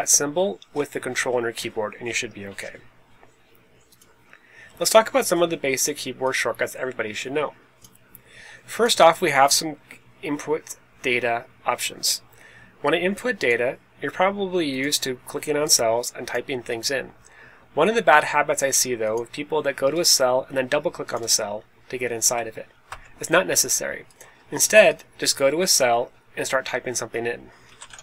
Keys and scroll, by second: 22.8 Escape, 27.4-28.0 typing.